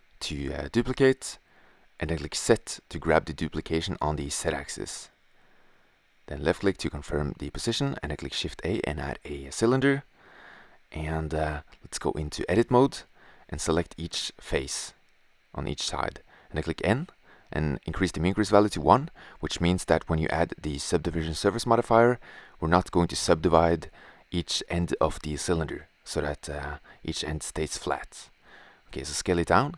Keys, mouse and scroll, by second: 0.2-2.3 drag, 2.3 shift+d, 4.8 middle click, 6.9 shift+a, 13.8 right click, 16.1 n, 17.0-18.2 drag, 18.4 n, 19.7-21.1 drag, 26.1 s, 27.2-27.5 drag.